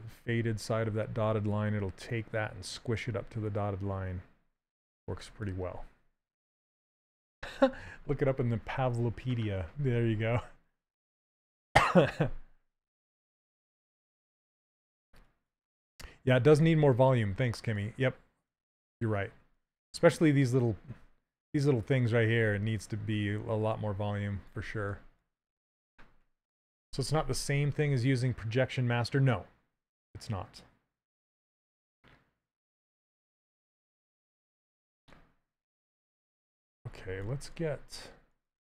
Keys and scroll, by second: 37.1 s.